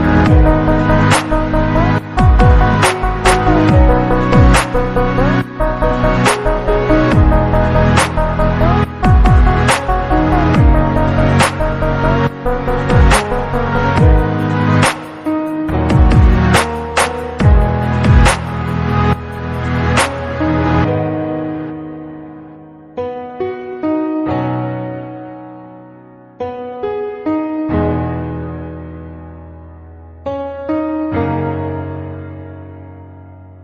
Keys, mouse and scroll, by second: 0.0 Tab, 0.3 click, 1.6 drag, 2.7 Tab, 3.0 click, 3.2-3.8 scroll down 3, 3.8 KP_Divide, 4.8-5.2 scroll down 4, 5.3-5.9 middle drag, 6.3 middle click, 6.6 click, 8.8 g, 9.6 KP_Divide, 10.3-10.8 scroll up 5, 10.8 drag, 12.0 shift+click, 12.9 click, 13.7 click, 14.3-14.6 scroll down 2, 14.6 click, 15.5 click, 16.2 h, 16.4 drag, 17.9 alt+h, 18.6 g, 20.7 h, 21.6 alt+h, 21.8 drag, 22.1 click, 22.4 h, 22.7 drag, 23.8 g, 25.0 alt+h, 25.5 KP_4, 26.1-26.7 scroll up 2, 26.7 g, 28.3 KP_3, 29.0 click, 29.2 drag, 30.3 drag, 31.8 KP_1, 32.1 KP_1, 32.3 KP_3, 33.4 KP_3.